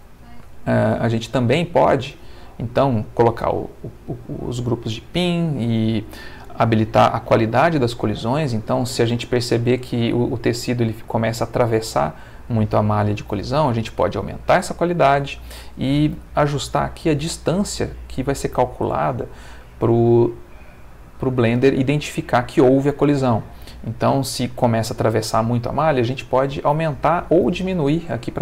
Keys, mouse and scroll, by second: 0.5 middle click, 1.4 middle click, 2.0 middle click, 5.2 middle click.